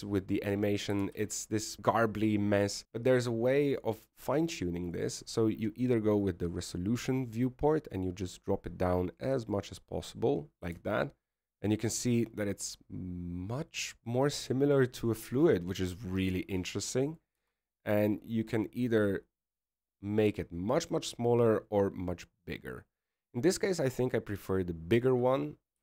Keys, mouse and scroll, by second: 2.2 alt+a, 5.9 right click, 7.0 click, 8.3 click, 12.8 alt+a, 18.5 alt+a, 19.5 s.